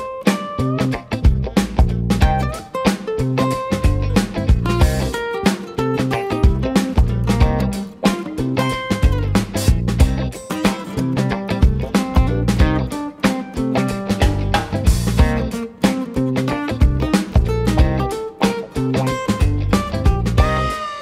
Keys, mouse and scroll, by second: 1.4-4.4 middle drag, 10.0 shift+d, 15.3-16.6 middle drag, 16.6 Tab, 17.2 Tab, 17.7-18.3 middle drag, 18.3 click, 19.0 click, 20.5 click.